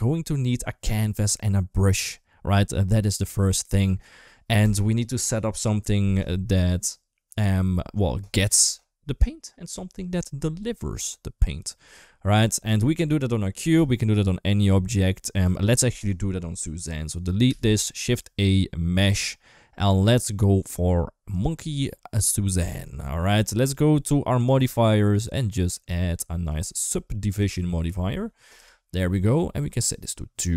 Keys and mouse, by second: 17.3-17.8 typing, 22.1 middle click, 22.7 shift+middle click, 24.2 click, 24.9 click.